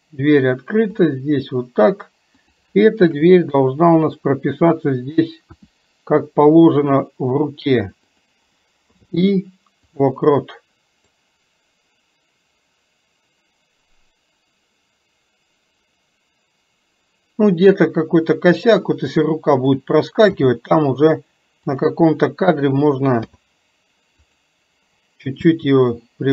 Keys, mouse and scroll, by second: 1.2 click, 2.4 click, 11.3-18.6 drag, 19.7 click.